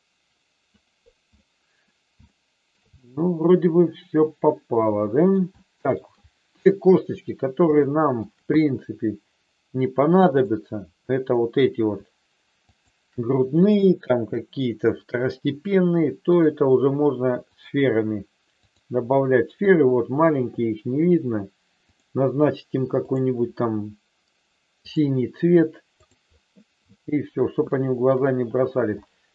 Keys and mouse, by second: 0.8 click, 1.3 middle click, 2.2 shift+middle click, 2.9-5.3 middle drag, 5.5 shift+middle click, 6.8 KP_1, 7.8 shift+middle click, 10.2-11.4 drag, 12.5-13.8 shift+drag, 16.2-17.5 drag, 18.5 click, 23.2-25.1 drag, 27.7 shift+middle click, 28.9 middle click.